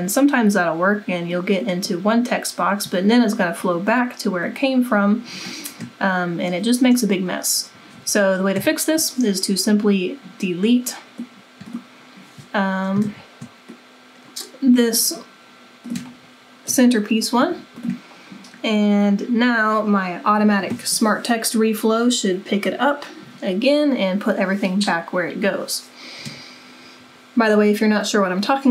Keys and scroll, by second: 8.5 w, 13.0 ctrl+z, 16.7 Delete.